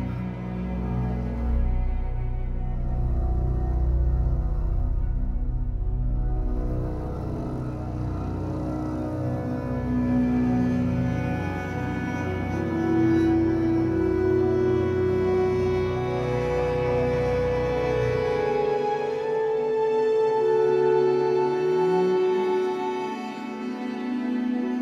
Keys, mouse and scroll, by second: 0.0 Tab, 0.2 scroll down 4, 0.3-0.7 middle drag, 0.7 click, 1.0-1.4 scroll down 3, 1.4-2.0 middle drag, 2.3 alt+middle click, 2.8-3.2 scroll up 1, 3.2 click, 3.7 g, 4.4 Tab, 4.7 z, 5.8 o, 6.1 p, 6.5 Tab, 6.7 click, 7.3 click, 7.5 z, 8.1 z, 9.3 click, 9.5-12.0 drag, 12.8-13.2 shift+middle drag, 13.2 scroll up 2, 14.2 click, 14.5 click, 14.9 click, 15.1 scroll down 3, 15.4-16.8 middle drag, 16.8 scroll up 2, 17.0-17.5 middle drag, 17.5-19.1 scroll up 2, 19.1-19.8 middle drag, 20.1 alt+middle click, 20.6-22.0 shift+middle drag, 22.0 click, 22.2 Tab, 22.2 scroll up 4, 22.7 shift+middle click, 23.4 click, 24.2 b, 24.3 g.